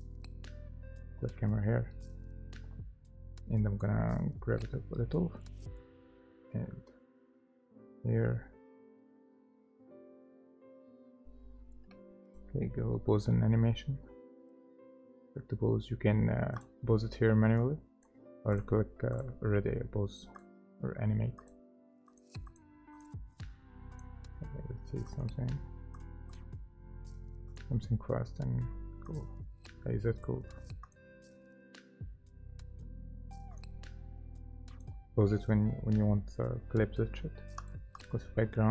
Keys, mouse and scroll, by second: 3.4 scroll down 1, 4.6 middle click, 5.8 right click, 8.2 scroll up 1, 9.0 middle click, 9.9 right click, 22.5 double click, 26.3 double click, 27.0 scroll down 1, 38.0 double click.